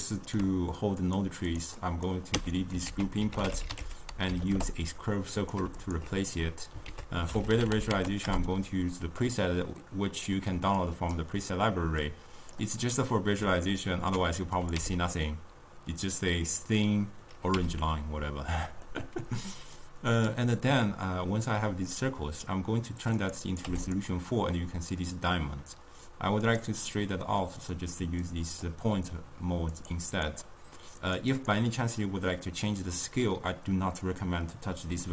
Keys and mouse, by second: 1.2-2.4 drag, 2.4 x, 5.8-9.3 alt+shift+drag, 9.3 ctrl+a, 12.2-13.2 drag, 13.2-14.8 middle drag, 14.8 m, 17.6 m, 23.9 click, 26.5 click, 29.8-35.1 drag.